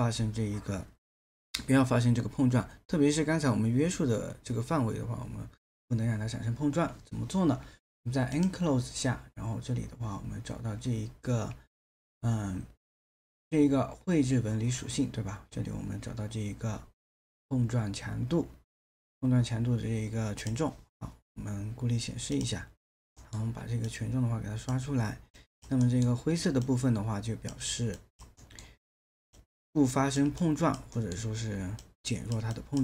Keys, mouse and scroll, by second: 23.2 alt+middle click, 25.9 alt+middle click, 28.4 alt+middle click, 31.0 alt+middle click.